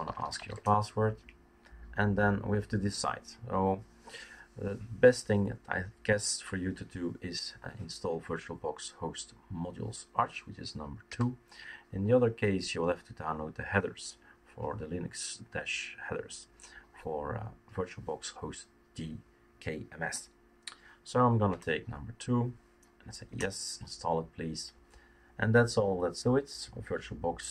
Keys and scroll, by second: 0.0-0.8 typing, 11.1 typing, 21.5 Return, 23.3 Return.